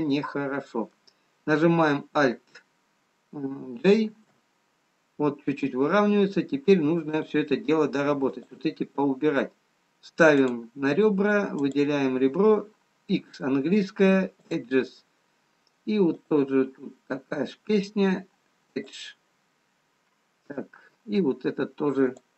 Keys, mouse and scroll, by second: 0.6 middle click, 0.6-1.4 scroll down 1, 4.7 alt+j, 7.9 click, 8.8 click, 12.4 click, 13.6 x, 16.9 click, 19.5 x.